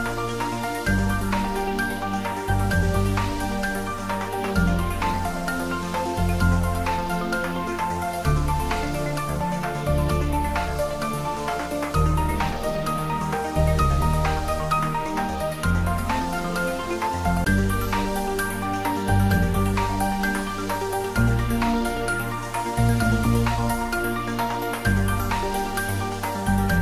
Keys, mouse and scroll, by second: 2.1 click, 2.3-4.5 middle drag, 4.5 shift+click, 6.2 click, 7.2 shift+click, 10.2 middle click, 11.1 shift+click, 14.2-15.8 middle drag, 15.8 shift+click, 16.0 shift+click, 16.6 middle click, 17.7 click, 18.1 middle click, 19.1 shift+click, 20.1 shift+click, 20.6-23.5 shift+middle drag, 23.5 ctrl+j, 24.4-24.8 scroll down 1, 24.8 middle click, 25.8-26.2 scroll up 1, 26.2 middle click.